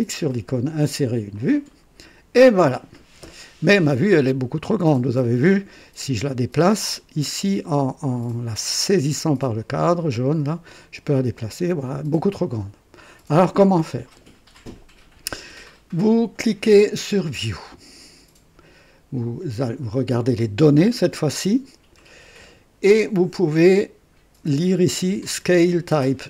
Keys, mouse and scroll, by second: 1.3 click, 3.2 scroll down 1, 4.9-5.2 scroll up 1, 5.4 scroll down 1, 9.6-12.3 drag, 20.6 click, 22.1 scroll up 1.